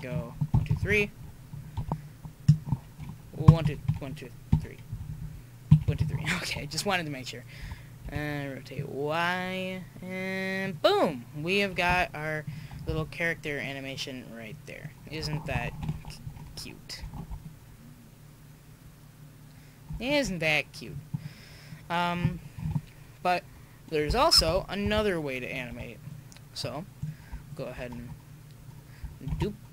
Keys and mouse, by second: 0.5 Left, 1.8 i, 3.6 Right, 3.9 Right, 4.5 Right, 4.9-5.2 Left, 5.7 Right, 5.8 Right, 7.6 r, 11.9 i, 14.5-15.8 drag, 15.8 KP_5, 17.1 alt+a, 20.1 alt+a, 21.0 click, 22.6 KP_1, 24.4 Tab, 25.0 Tab, 26.7-27.5 drag, 27.0-29.3 right drag, 29.3 shift+d.